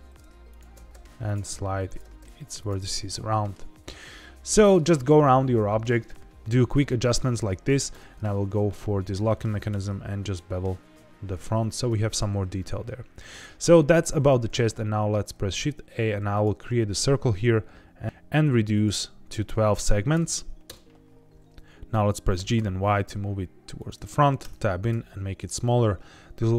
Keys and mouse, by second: 0.4 click, 0.7 g, 0.9 g, 1.2 click, 1.9 click, 2.0 g, 2.1 g, 2.5 click, 2.8 middle click, 3.6 Tab, 3.8-4.7 middle drag, 6.8 middle click, 7.7 click, 7.9 Tab, 8.4 3, 8.6 click, 9.5 ctrl+b, 11.5 click, 11.8 Tab, 12.5 middle click, 13.1 shift+s, 14.4 shift+a, 18.0 shift+a, 18.7-21.0 drag, 22.3 g, 22.5 y, 23.7 click, 24.4 Tab, 24.8 s.